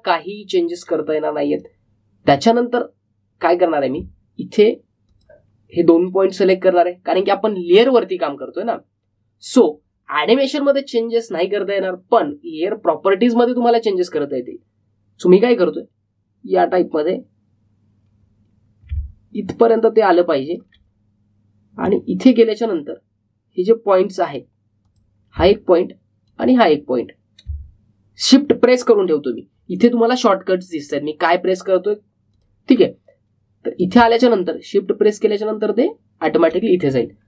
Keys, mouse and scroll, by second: 2.4 click, 16.3-22.8 drag, 22.8-37.2 drag.